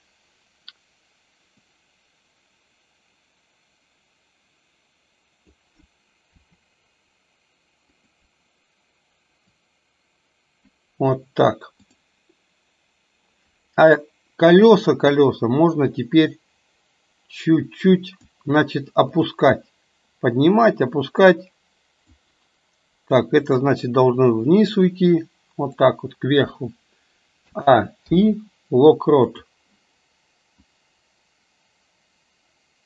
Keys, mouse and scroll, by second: 1.6 click, 2.4-5.7 drag, 6.4 r, 9.8-10.8 drag, 15.2 click, 16.0-18.2 drag, 19.1 click, 20.5 click, 20.9-22.2 drag, 23.1 click, 23.5-25.9 drag, 27.5 a, 28.1 i, 30.7-32.8 drag.